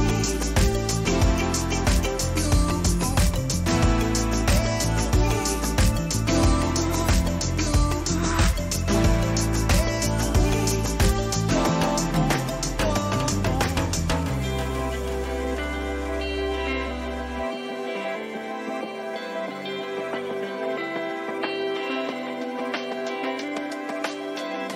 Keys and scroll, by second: 2.7 ctrl+alt+z, 8.8 ctrl+z, 11.3 ctrl+z, 16.5 ctrl+alt+z, 18.5 ctrl+alt+z, 22.4 ctrl+t, 23.1 Return, 24.1 ctrl+-.